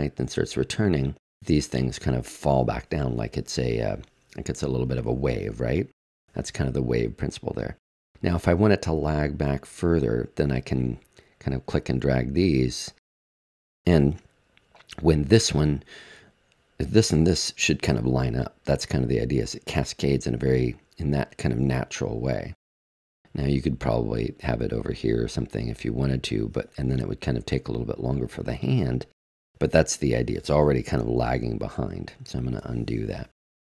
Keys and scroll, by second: 31.2 super+z, 32.1 super+z.